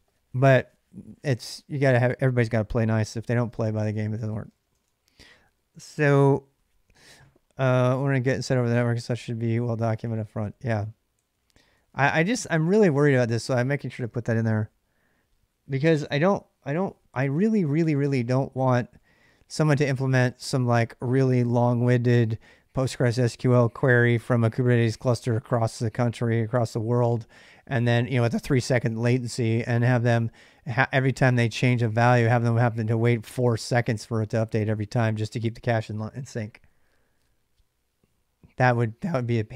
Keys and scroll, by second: 3.0-5.1 typing, 9.6 ctrl+[, 9.6-13.1 typing, 18.5 j, 18.6 j, 19.1 j.